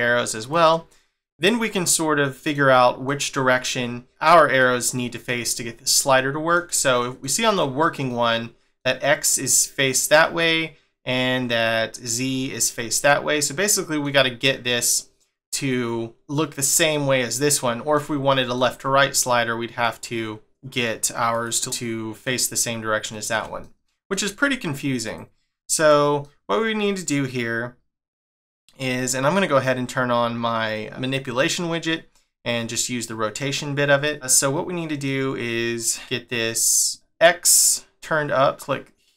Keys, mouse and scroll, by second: 1.2 middle click, 2.7 middle click, 3.7 middle click, 4.6 middle click, 6.2 shift+middle click, 8.1 middle click, 10.2 middle click, 13.3 middle click, 17.5 middle click, 19.8 click, 20.4 click, 21.6 middle click, 23.1 middle click, 25.0 click, 25.8 click, 26.2 middle click, 31.1 click, 34.0 middle click, 35.9 middle click, 38.4 click.